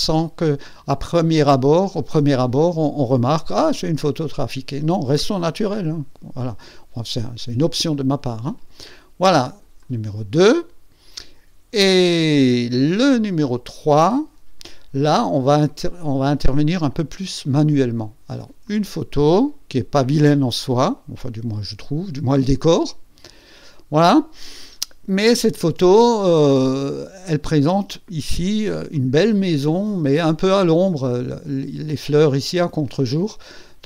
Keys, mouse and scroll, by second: 9.7 click, 11.7 click, 14.0 click, 18.6 click, 19.4-22.5 drag.